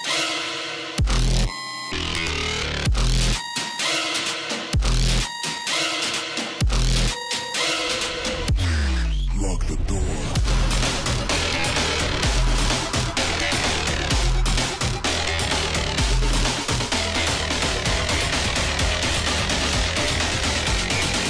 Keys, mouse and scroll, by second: 0.3 alt+scroll up 1, 0.4 click, 2.7-3.4 alt+scroll up 1, 3.4 click, 4.3 ctrl+z, 4.9 ctrl+c, 5.4 ctrl+f, 7.0-11.3 alt+shift+drag, 12.5-13.0 alt+scroll down 1, 13.0 click, 13.9 alt+scroll down 1, 15.0-17.6 drag, 20.1 scroll down 1, 20.2 click, 20.9 alt+scroll down 1.